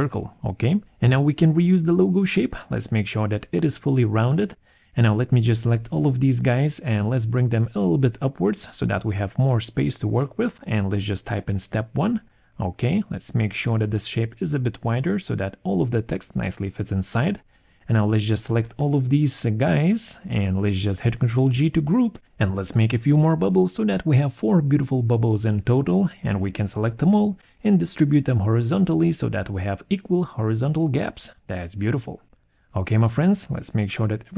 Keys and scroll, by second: 11.1-12.2 typing, 21.1 ctrl+g, 32.3 ctrl+g.